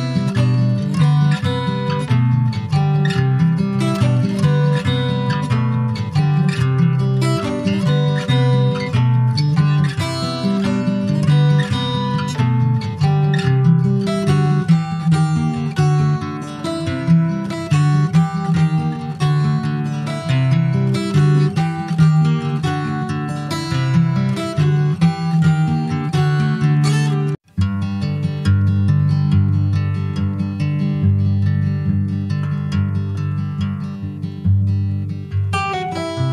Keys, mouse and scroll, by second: 0.8 s, 2.3-2.7 scroll down 2, 3.0 /, 4.2-5.5 middle drag, 5.5 s, 10.1 middle click, 10.8 ctrl+s, 11.1 shift+middle click, 12.0 click, 13.0 scroll down 3, 13.3 alt+middle click, 13.8 alt+middle click, 14.4-15.1 alt+scroll up 2, 15.1 shift+d, 17.1 s, 19.8 click, 21.0-21.4 scroll up 4, 21.4-22.4 shift+middle drag, 22.4 e, 22.9 s, 23.8 s, 24.0-25.5 drag, 25.6 click, 26.1 middle click, 26.2-26.5 scroll up 2, 26.6 click, 27.2 Tab, 27.7 Tab, 28.0 click, 28.6 Tab, 28.9 click, 30.8 3, 31.1 click, 32.3 Tab, 32.4 click, 35.3 /, 35.8 scroll down 2, 36.0 middle click.